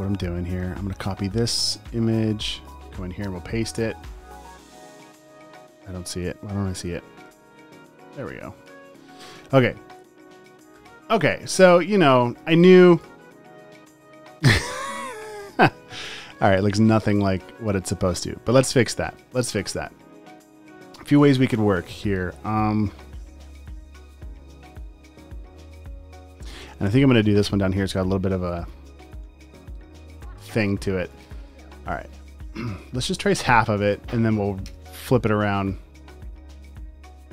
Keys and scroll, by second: 7.3 super+v, 9.4 space, 10.3 space, 11.2 space, 12.4 space, 12.9 space, 15.7 space, 19.4 space, 20.9 space, 24.1 space, 24.7 space, 28.6 space, 29.3 r, 30.5 typing, 31.6 space, 32.1 space, 32.8 space, 33.3 super+space, 34.0 space, 34.7 p, 36.2 space, 36.8 space.